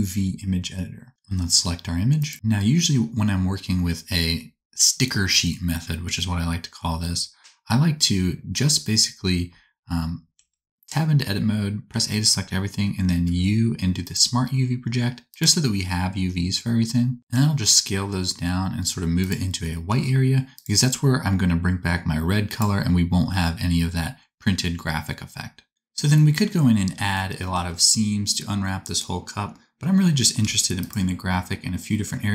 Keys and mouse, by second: 10.3 Tab, 11.8 a, 13.2 u, 17.2 ctrl+z, 17.2 middle click, 17.2-23.9 drag, 17.2 s, 19.8 g, 20.8 s, 26.2-27.3 middle drag, 30.4 3.